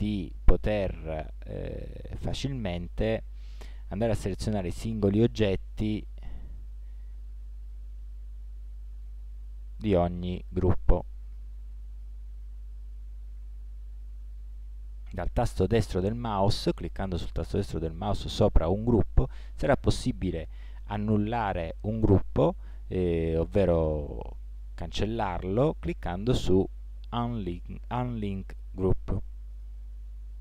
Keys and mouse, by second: 5.5-6.8 right drag, 6.8-29.7 drag.